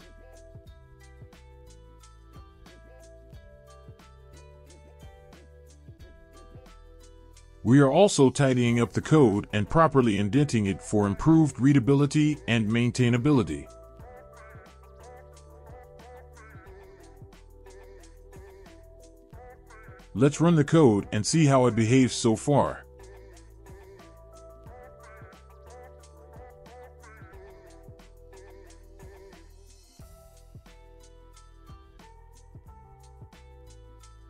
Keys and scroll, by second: 0.7 ctrl+shift+x, 4.1 Return, 4.4 Return, 4.9 ctrl+v, 12.5 Tab, 14.9 BackSpace, 19.3 BackSpace, 33.8-34.2 typing.